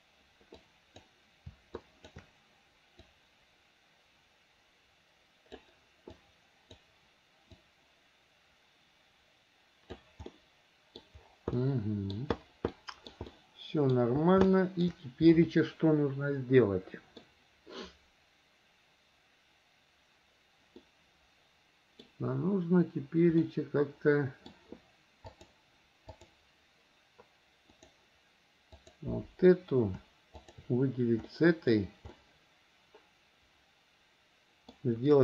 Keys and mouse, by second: 0.8 click, 1.9 shift+click, 3.3-5.8 drag, 6.4 click, 7.7-10.1 drag, 10.5 middle click, 11.7 middle click, 12.8 middle click, 13.4 middle click, 14.6 shift+middle click, 15.5-17.4 middle drag, 20.9-22.2 middle drag, 23.6-24.7 middle drag, 25.5-26.5 drag, 27.9 click, 28.9 click, 30.6 shift+click, 31.5 middle click, 32.3-34.9 middle drag.